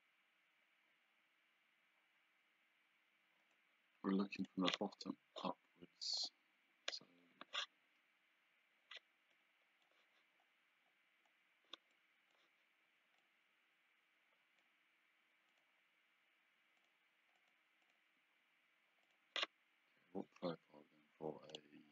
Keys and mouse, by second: 4.5 click, 6.3 click, 9.4 click, 12.0 click, 13.3 click, 15.6 click, 16.8 click, 19.1 click, 21.6 click.